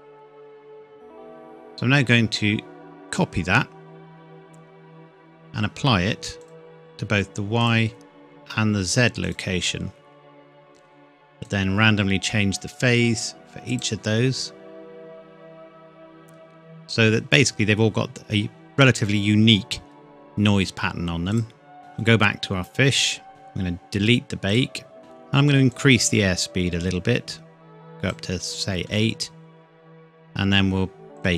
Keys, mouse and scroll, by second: 3.1 click, 21.3 click, 23.2 scroll down 1, 24.5 click, 25.0-25.7 scroll down 1, 25.7 click, 29.6-31.2 scroll up 1, 31.2 click.